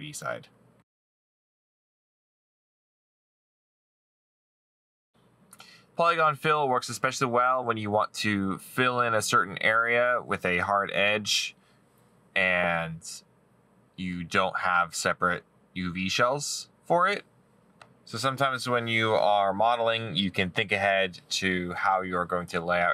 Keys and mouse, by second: 5.1 middle click, 5.5 right click, 8.6 middle click, 10.7 middle click, 12.3 middle click, 21.8 middle click.